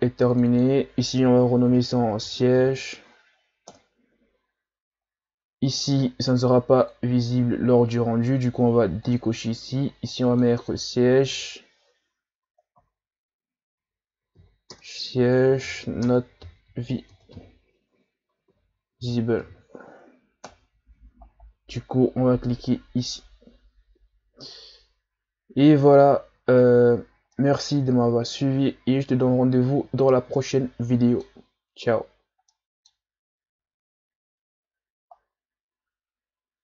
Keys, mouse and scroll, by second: 0.3 click, 0.5-3.5 drag, 5.6 click, 6.8 click, 9.0 click, 10.1 click, 10.2-13.3 drag, 26.0-26.6 scroll down 2, 26.6-27.0 shift+scroll down 1, 27.0 scroll up 1, 27.3-30.4 middle drag, 31.4-32.0 scroll up 1, 32.0-32.5 scroll down 2, 32.5-35.5 middle drag.